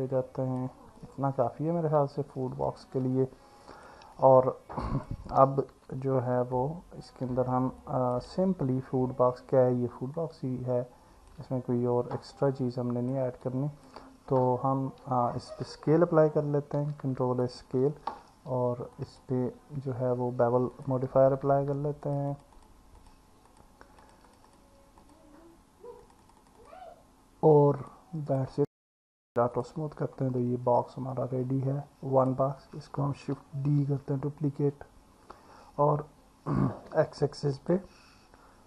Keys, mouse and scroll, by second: 1.0-2.8 alt+middle drag, 3.6 click, 4.2 alt+middle click, 5.7 Tab, 6.5-7.1 alt+middle drag, 7.8 click, 10.2-11.3 alt+middle drag, 12.5-13.1 alt+middle drag, 13.4-13.9 alt+middle drag, 16.8 ctrl+a, 19.1-20.9 drag, 24.3 click, 24.5 click, 25.0 click, 26.1 click, 26.6 click, 27.9-28.4 drag, 30.8 click, 34.0 shift+d, 36.9 x.